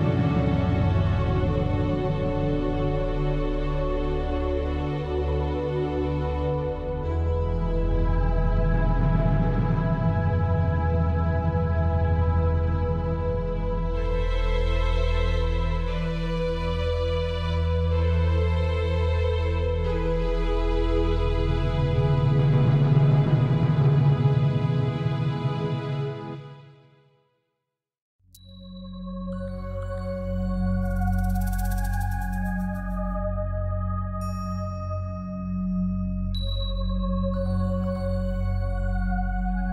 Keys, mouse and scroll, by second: 0.7 click, 0.7 shift+middle click, 1.7 alt+shift+click, 3.2 Delete, 4.6 middle click, 5.4 click, 6.0 click, 6.5 click, 7.1 alt+shift+click, 8.7 middle click, 10.0 z, 10.1 middle click, 11.1 z, 11.6 Delete, 12.9 shift+middle click, 13.1 scroll up 6, 13.5 shift+middle click, 13.9 middle click, 16.2 click, 17.0 alt+shift+click, 17.1 alt+shift+click, 18.5 Delete, 20.2 alt+shift+click, 20.7 alt+shift+click, 21.4 Delete, 22.4 click, 22.9 click, 23.1 click, 25.0 Delete, 25.7 scroll down 3, 26.0 middle click, 28.5 KP_7, 29.0-29.5 scroll down 5, 29.5 middle click, 30.7-31.4 scroll up 6, 31.0 shift+middle click, 31.6 middle click, 32.4 middle click, 33.6 Tab, 34.0 click, 34.7 shift+click, 35.5 ctrl+j, 36.1 Tab, 36.5 Tab, 36.7 Tab, 37.0 Tab, 37.2 middle click, 37.6 middle click, 38.5 Tab, 38.7 middle click, 39.2 middle click.